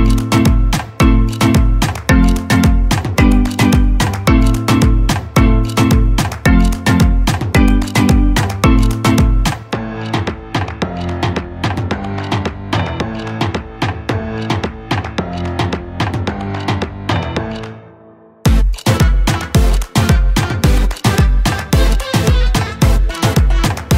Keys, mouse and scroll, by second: 0.0-0.2 typing, 0.6 click, 1.2 4, 2.2 6, 2.7 space, 3.7-4.2 drag, 5.6 drag, 6.6 scroll down 1, 6.8-7.3 scroll up 2, 7.3 r, 7.4 click, 7.7 Escape, 10.1 l, 11.4 space, 12.4 m, 14.0 typing, 14.1 Return, 15.3 space, 15.9 m, 17.3 click, 17.5 l, 18.5 click, 19.1 space, 21.1 l, 22.5-23.9 typing, 22.7 Delete.